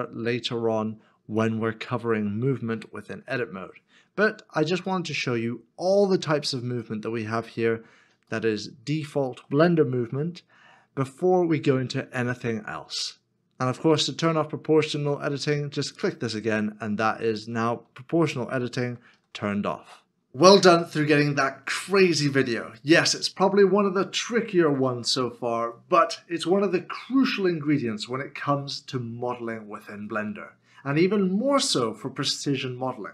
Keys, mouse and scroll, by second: 1.9 middle click, 4.1 shift+middle click, 4.2 scroll down 1, 4.9 scroll down 1, 5.1 middle click, 7.8 scroll up 1, 8.4 shift+middle click.